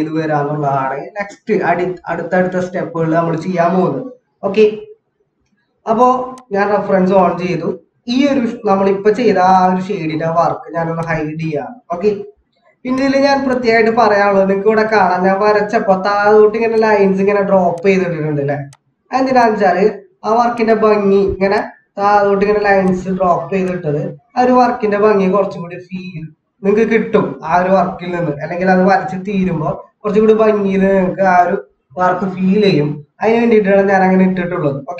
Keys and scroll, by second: 5.5 ctrl+=, 14.5 ctrl+-.